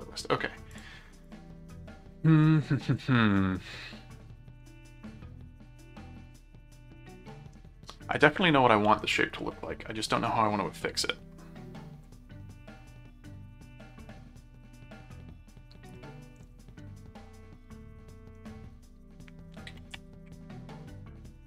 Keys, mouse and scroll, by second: 0.7 click, 4.6-6.3 middle drag, 6.7 middle click, 7.7 middle click, 10.8-13.8 middle drag, 16.8-21.4 middle drag.